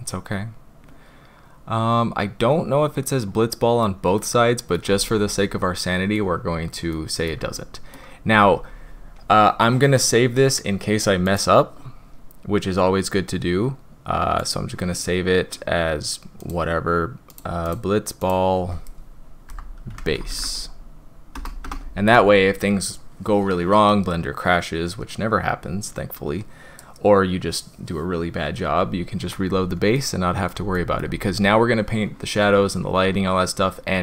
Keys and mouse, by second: 4.1-4.7 shift+middle drag, 5.0-6.1 middle drag, 6.9 middle click, 7.5-7.9 shift+middle drag, 11.3 click, 14.7 middle click, 29.9 middle click, 30.7 shift+middle click.